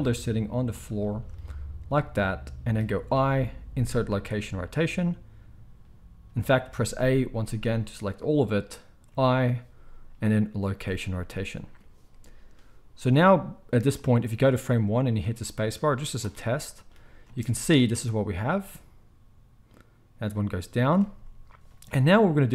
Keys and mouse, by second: 0.9-13.9 shift+middle drag, 3.1 i, 6.7 a, 9.1 i, 13.9-22.5 drag, 17.2 space, 21.0 space.